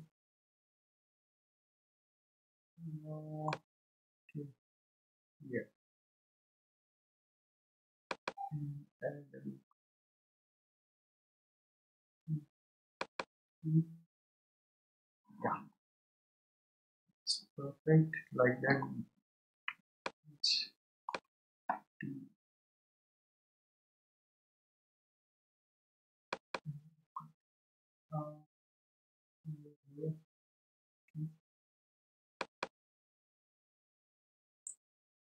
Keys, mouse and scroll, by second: 4.4-5.1 scroll up 1, 8.2-11.1 drag, 13.1-16.0 drag, 16.0-17.1 scroll down 2, 17.1-18.1 scroll up 1, 18.1 scroll up 1, 20.2-23.0 shift+middle drag, 26.5-29.5 drag, 32.6-35.2 drag.